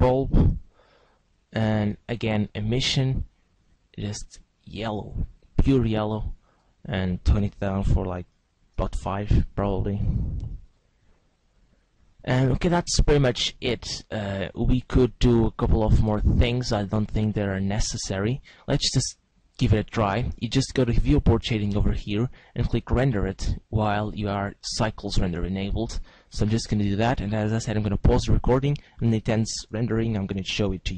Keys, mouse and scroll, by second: 1.8 click, 3.8 click, 6.5 click, 19.0 click, 27.0 click.